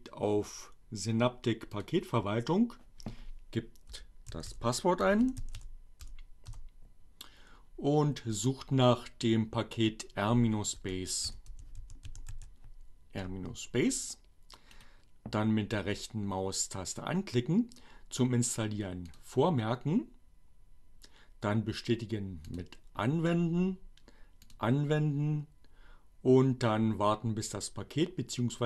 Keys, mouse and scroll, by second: 0.1-2.1 drag, 3.0-6.2 typing, 6.8 Return, 10.0-12.7 typing, 14.6 right click, 18.2-19.4 drag, 22.4 click, 24.3 click.